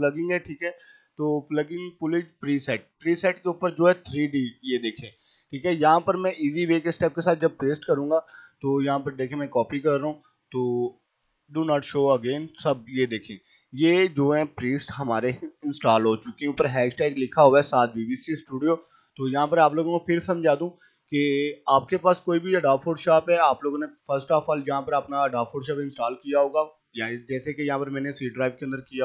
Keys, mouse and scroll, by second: 4.7 click, 5.9 right click, 7.4 click, 18.7 click, 25.8 click.